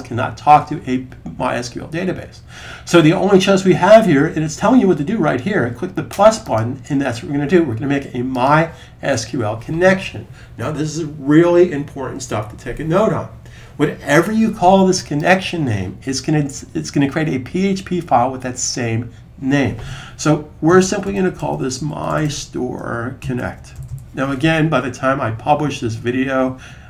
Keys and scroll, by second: 20.6-23.7 typing.